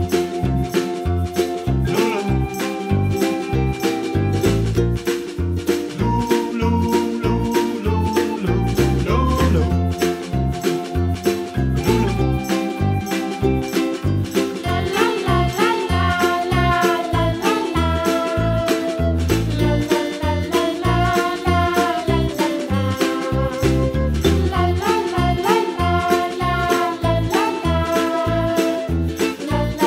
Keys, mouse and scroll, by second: 0.4-1.6 scroll up 1, 1.8 click, 2.5 3, 2.7 click, 3.4 g, 5.1 scroll down 3, 5.2 middle click, 5.6 scroll up 4, 5.9 middle click, 6.3 click, 6.6 shift+click, 6.8 shift+click, 7.0 shift+click, 8.3 ctrl+z, 8.5 s, 9.4 s, 10.9 scroll down 2, 11.1-12.3 middle drag, 12.5 s, 14.0 s, 14.9 s, 15.9 s, 17.1 g, 17.9 scroll down 1, 18.1 middle click, 18.6 s, 19.8 r, 21.2 g, 23.4-24.5 middle drag, 24.5 r, 25.9 middle click, 26.7 scroll up 1, 27.4 click, 27.9 scroll up 2, 28.1-29.3 middle drag.